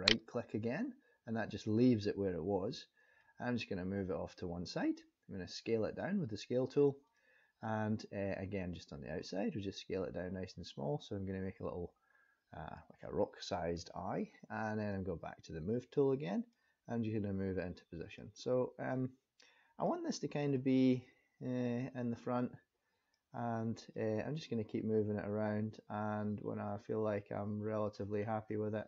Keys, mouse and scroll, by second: 3.2 click, 7.0 click, 8.7 click, 14.7 click, 16.5 click, 18.9 click, 20.5 click, 22.4 click, 23.9 click, 28.1-28.8 scroll up 4.